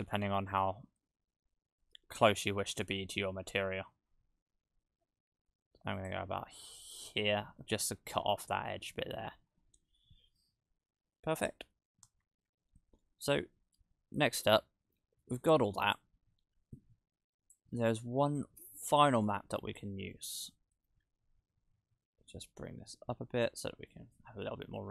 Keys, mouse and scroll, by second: 6.3 scroll down 1, 14.2 middle click, 15.2 click, 16.8 click, 17.8-18.3 scroll down 1, 18.3 middle click, 18.8 click, 20.1 middle click, 23.9 click.